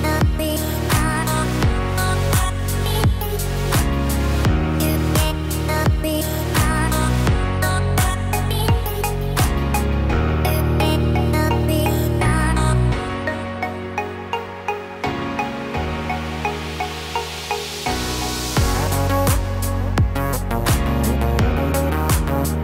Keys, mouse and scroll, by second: 0.2-0.7 shift+scroll up 3, 0.7 shift+middle click, 2.9 shift+s, 8.0 scroll down 4, 8.2 scroll up 1, 8.3-9.1 scroll down 2, 9.1-9.6 scroll up 5, 10.1 scroll up 3, 11.1 shift+s, 18.6-20.1 scroll down 6, 20.1 Tab, 20.1-20.7 scroll down 2, 20.7 click, 21.3-22.3 scroll up 4, 22.3 click.